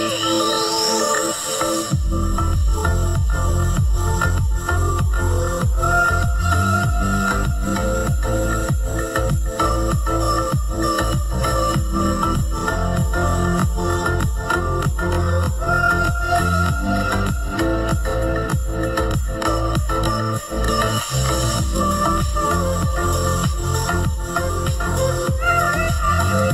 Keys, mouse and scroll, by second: 4.9 double click, 9.6 double click, 12.3 double click.